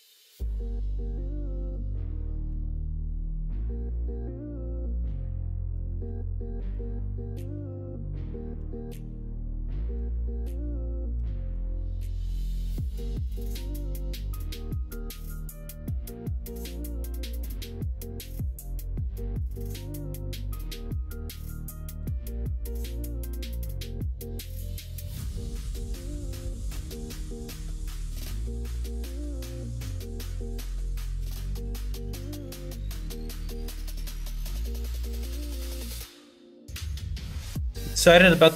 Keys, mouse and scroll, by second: 1.7 middle click, 2.7 middle click, 5.0 f, 5.5 middle click, 6.0 ctrl+r, 7.0 middle click, 8.6 KP_1, 9.9 1, 10.4 middle click, 11.1 2, 11.5 click, 12.2 KP_1, 14.5 1, 15.4 shift+click, 16.6 s, 18.0 ctrl+z, 20.4 middle click, 21.7 KP_1, 22.0 KP_3, 22.8 KP_1, 23.9 s, 25.9-26.9 middle drag, 27.7 shift+middle click, 28.9 middle click, 29.1 scroll down 1, 29.4 shift+middle click, 29.6 scroll down 1, 30.5-31.6 shift+middle drag, 31.7 middle click, 31.7 scroll up 1, 32.5 middle click, 32.5 scroll up 1, 33.8 2, 34.2 click, 34.5 middle click, 36.0 middle click, 36.9-38.3 middle drag.